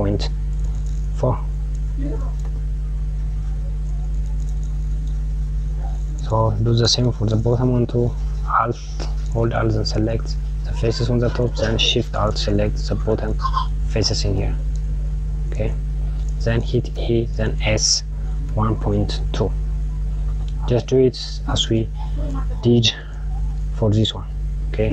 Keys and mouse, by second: 9.3 click, 13.4 alt+shift+click, 15.0 click, 16.3 e, 22.7 KP_Subtract.